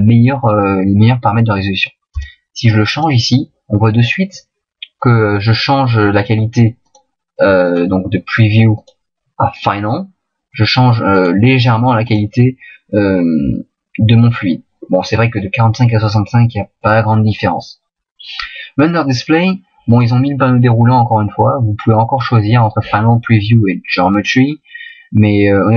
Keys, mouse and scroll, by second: 3.1 click, 6.8 click, 8.7 click, 11.1 click.